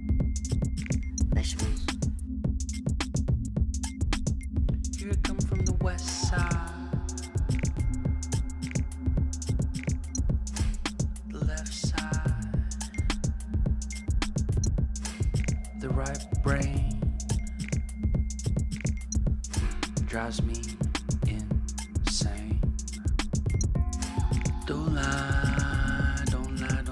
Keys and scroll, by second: 0.0-1.3 typing, 12.5-18.5 typing, 19.2 Return, 23.9 Up, 24.4 Up.